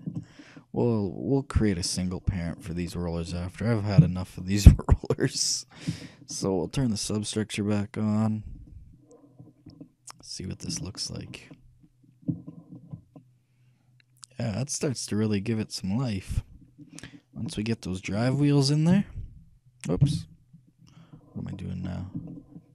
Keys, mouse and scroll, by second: 0.0-4.8 shift+middle drag, 4.2 KP_3, 5.0 middle click, 6.2-8.8 middle drag, 8.8-10.6 shift+drag, 9.7-15.2 middle drag, 17.2-18.8 middle drag, 19.1 KP_3, 19.1 KP_Decimal, 20.2 KP_3, 21.5-22.4 scroll down 1, 22.5-22.7 shift+middle drag.